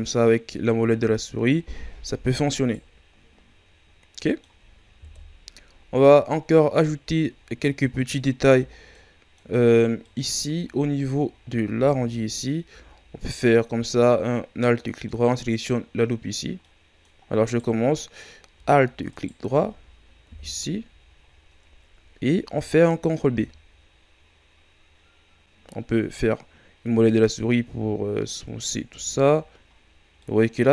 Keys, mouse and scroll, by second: 0.6 scroll down 2, 1.4 shift+scroll up 2, 2.5-3.2 right drag, 4.9 KP_1, 6.7 scroll up 2, 7.3 shift+scroll down 5, 7.7 scroll up 4, 8.4 Tab, 8.7 scroll down 1, 8.9 middle click, 9.5-10.0 scroll down 1, 10.0 middle click, 10.3 scroll down 2, 10.7-11.2 shift+scroll up 1, 11.2-12.1 scroll up 2, 12.1-13.1 alt+right drag, 13.1 scroll down 2, 13.4-15.4 middle drag, 15.4-15.7 scroll up 1, 16.6 middle click, 17.4 right click, 17.9-19.0 middle drag, 19.0-20.2 alt+right drag, 20.2 KP_1, 21.2-21.6 shift+scroll down 2, 21.6-23.2 ctrl+scroll up 6, 23.2 ctrl+b, 27.6 Tab, 28.3 scroll down 5, 28.9 a, 29.6 scroll down 2, 30.1-30.7 middle drag.